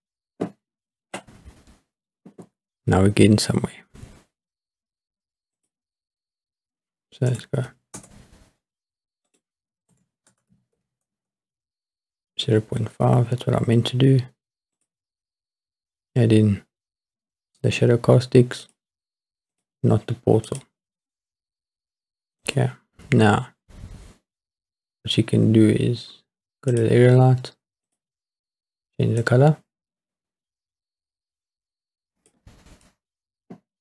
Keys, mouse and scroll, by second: 5.6-8.0 drag, 9.3-11.1 drag, 14.8 click, 18.6 click, 19.5 click, 20.5 click, 22.4 click, 26.7 click, 27.9 click.